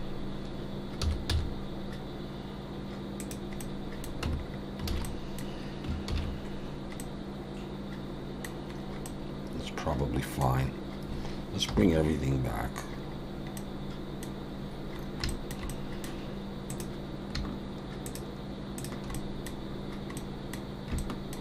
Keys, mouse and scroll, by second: 1.3 s, 3.6 middle click, 4.2 Tab, 4.4-4.8 scroll down 2, 4.9 alt+a, 5.0 middle click, 6.8 ctrl+s, 7.0 middle click, 8.7-9.1 scroll up 3, 9.0 middle click, 10.6 scroll down 2, 11.7 scroll down 1, 11.7 /, 13.0-13.6 scroll down 3, 13.6 middle click, 15.0-15.3 scroll up 3, 15.3 shift+middle click, 15.7 middle click, 16.7 click, 18.0 shift+click, 18.8 click, 19.1 middle click, 20.2 middle click, 21.0 shift+middle click.